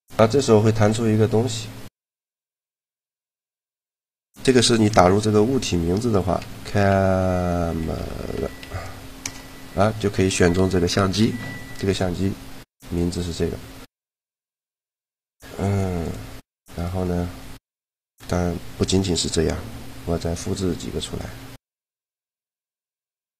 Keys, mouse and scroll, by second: 16.7 right click, 17.5-18.6 middle drag, 20.1 shift+d, 21.3 shift+d, 22.1 shift+d.